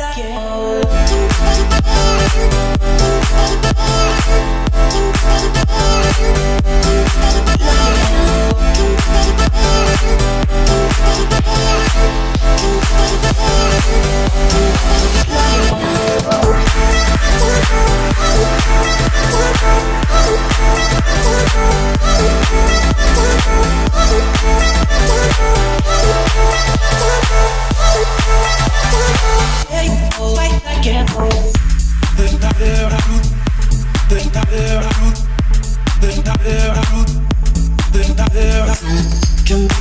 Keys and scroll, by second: 4.3 `, 4.5 Escape, 4.8 o, 9.7 Escape, 16.1 Escape, 17.1 a, 17.2 w, 18.4 a, 18.6 w, 20.2 s, 21.1 Escape, 26.7-28.7 typing, 29.2 Escape, 36.5 1, 36.8 0, 37.0 Return.